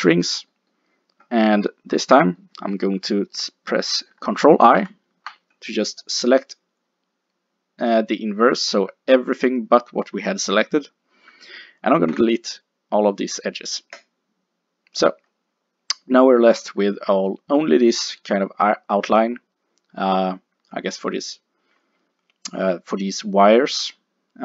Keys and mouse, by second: 4.8 ctrl+i, 12.1 x.